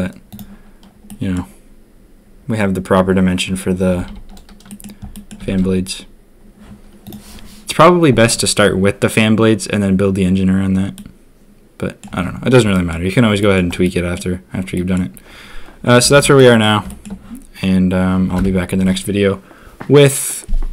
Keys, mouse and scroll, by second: 0.3 click, 1.0 click, 3.9 a, 4.0 a, 4.6 middle drag, 5.1 middle click, 5.5 ctrl+s, 10.9-12.0 middle drag, 12.7 middle click, 13.4 middle click, 13.8-14.1 middle drag, 14.7 middle click, 16.2 ctrl+s, 16.3 drag, 16.8 shift+click, 18.3 n.